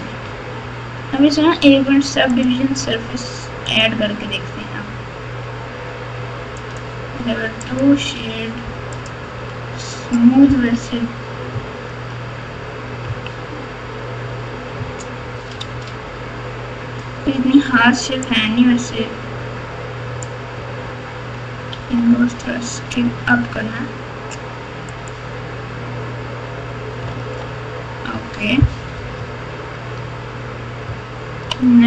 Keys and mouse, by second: 0.2 Tab, 2.3-3.8 drag, 6.5 click, 7.6-9.1 right drag, 10.7-12.0 typing, 13.0 KP_3, 14.0 Tab, 15.6 alt+z, 18.2-20.2 drag, 21.7 s, 25.0-26.2 right drag, 27.1 alt+z, 28.1 Tab, 28.9-31.5 typing.